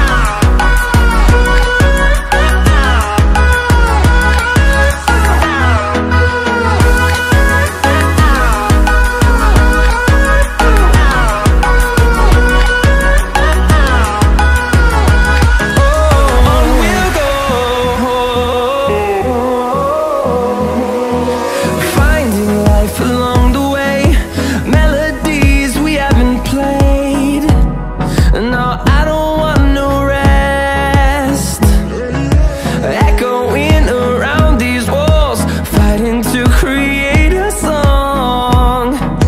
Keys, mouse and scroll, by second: 10.7-11.1 drag, 11.2-11.6 scroll down 4, 11.6-12.3 middle drag, 12.3-12.7 drag, 13.6 s, 16.0 KP_7, 16.7-17.6 scroll down 8, 17.6-18.3 scroll up 5, 18.4 s, 19.4 click, 20.1-22.4 middle drag, 22.4 click, 23.1 s, 26.5-27.8 drag, 28.0-30.0 middle drag, 30.0-30.6 scroll up 4, 30.6-31.4 middle drag, 31.4-31.8 drag, 32.4 click, 34.0 KP_3, 36.2 g, 38.8 KP_1.